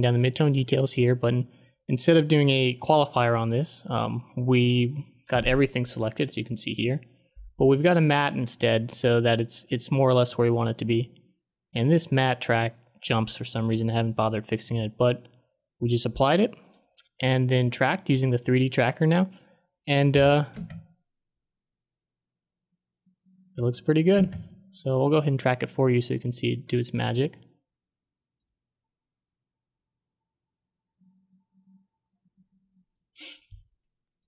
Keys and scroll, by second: 20.5 space, 24.1 space.